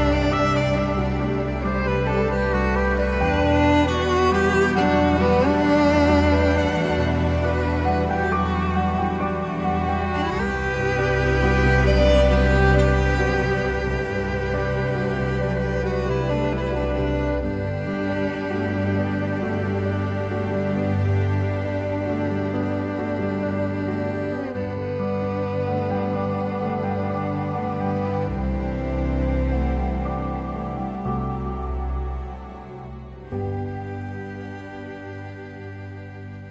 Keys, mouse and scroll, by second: 20.1 Return, 20.1 2, 27.7 m, 27.8 m, 27.9-28.3 m.